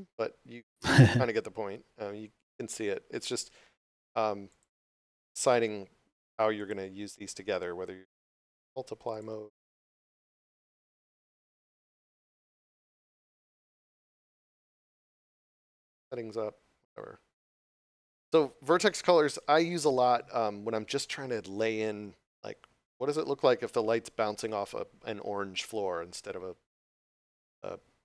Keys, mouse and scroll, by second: 4.4 click, 9.1 click, 12.9 click.